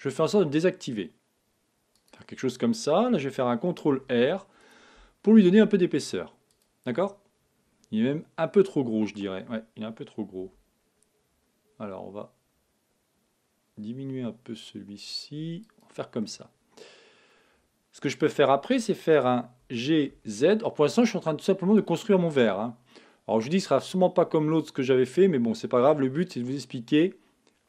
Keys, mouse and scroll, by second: 2.0-3.8 drag, 6.6-8.4 drag, 6.9-8.8 middle drag, 10.4 s, 15.8-17.4 drag, 16.2-18.2 middle drag, 19.6 g, 22.1-24.1 middle drag.